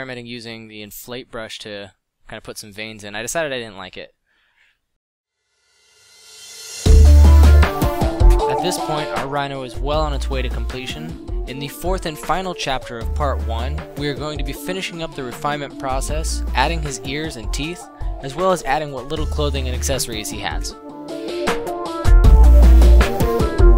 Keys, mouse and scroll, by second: 0.3 middle drag, 4.1 a, 7.0-7.6 middle drag, 9.0-10.2 middle drag, 13.0-13.4 drag, 15.7 z, 16.4 s, 17.8 ctrl+r, 19.0 s, 20.2 Left, 21.6 Right, 21.6 Left, 22.6 Left, 23.0 a, 23.7 Left.